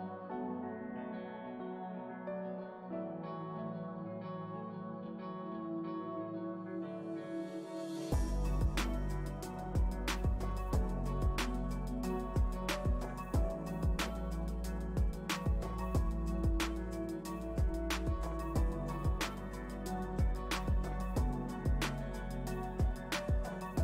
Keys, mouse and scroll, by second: 0.1-6.0 drag, 6.0 middle click, 6.8-9.9 shift+drag, 11.0 shift+click, 11.8-13.9 middle drag, 13.9-16.4 drag, 16.4 middle click, 17.0-19.6 drag, 19.6-21.7 middle drag, 21.7 shift+click, 22.3 middle click, 22.9-23.8 shift+drag.